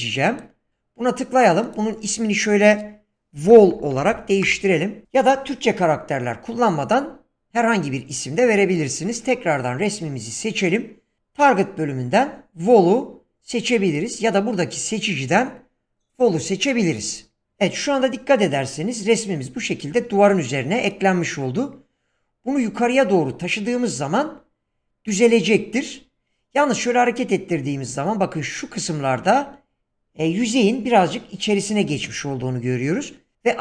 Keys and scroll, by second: 3.3 Caps_Lock, 3.4-4.6 typing.